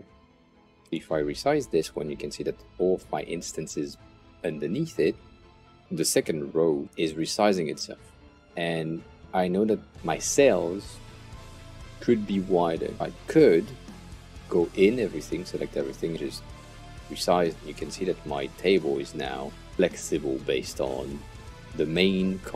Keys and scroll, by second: 14.0 Return.